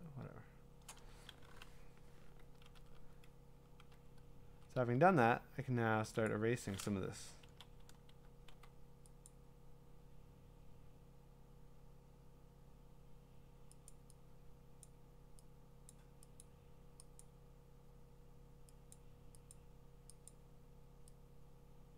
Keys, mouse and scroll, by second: 3.4 ], 3.9-4.6 ], 4.8 ], 6.0 ], 6.3 click, 7.5 ctrl+z, 8.5 x, 9.3 click, 13.9 click, 14.8 click, 15.9 click, 16.4 click, 17.2 click, 18.9 click, 19.5 click, 20.3 click.